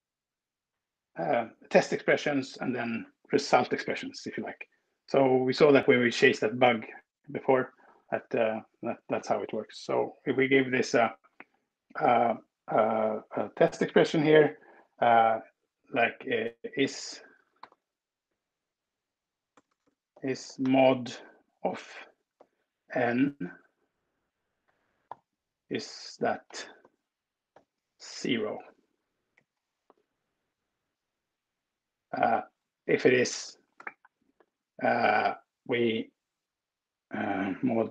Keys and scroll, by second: 16.7-17.9 typing, 19.4-20.9 typing, 22.4 n, 24.1 ctrl+Up, 25.0-28.2 typing, 29.1 ctrl+alt+Right, 31.0 Right, 32.1 ctrl+alt+Down, 33.5 space, 37.5 Left, 37.8 Left.